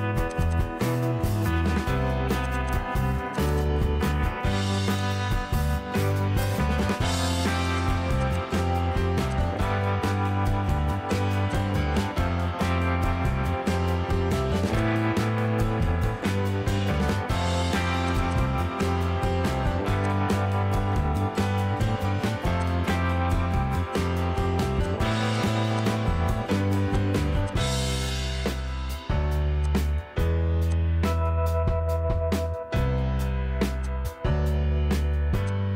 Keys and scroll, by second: 1.7 Delete, 1.7 typing, 3.0 Delete, 3.7 Delete, 5.4 Delete, 7.1 Escape, 8.0 Escape, 8.9 p, 13.0 Escape, 17.2 Escape, 19.4 l, 26.4 m.